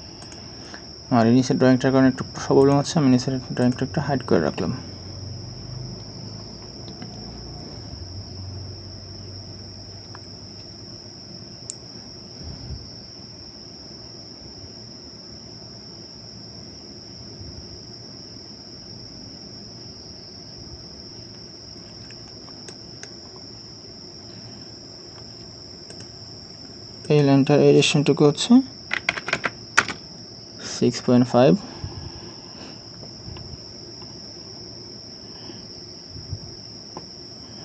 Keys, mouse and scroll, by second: 5.1-8.2 scroll up 1, 22.2-22.7 scroll down 1, 22.7 right click, 28.9-29.3 typing, 29.8 Return.